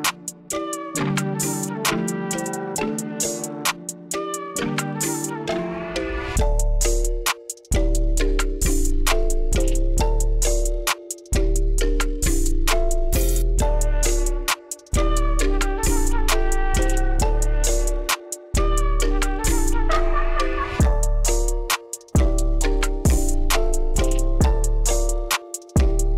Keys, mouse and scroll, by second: 4.6 click, 5.6 KP_6, 5.9 Return, 8.8-11.8 drag, 13.4 click, 19.9-25.3 drag.